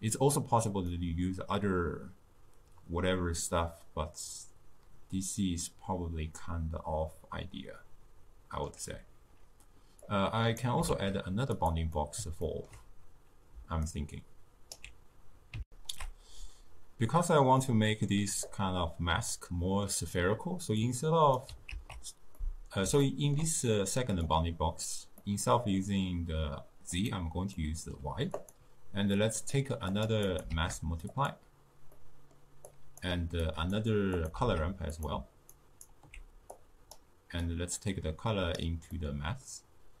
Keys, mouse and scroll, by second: 10.2 click, 11.1 shift+d, 12.1-14.0 middle drag, 14.0-15.7 alt+right drag, 15.7 ctrl+alt+shift+q, 17.6 middle click, 18.5-19.7 drag, 19.7-20.9 middle drag, 20.9-22.1 drag, 22.1 ctrl+x, 22.4-24.3 middle drag, 24.3 click, 25.3-27.0 middle drag, 27.0 click, 27.6-28.4 middle drag, 28.4 click, 29.2-30.0 middle drag, 30.0 click, 30.4 click, 30.6 shift+d, 32.0-32.8 middle drag, 32.8 drag, 33.5 drag, 34.3 click, 34.4 shift+d, 35.6-36.6 alt+right drag, 36.6-39.0 drag, 39.0-40.0 middle drag.